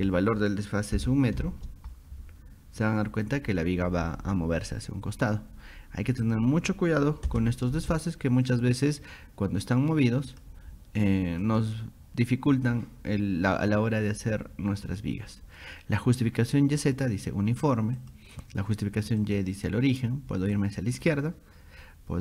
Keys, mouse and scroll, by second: 6.3 click, 10.3 click, 11.4 click, 16.8 click, 18.0 click, 19.2 click, 20.6 click.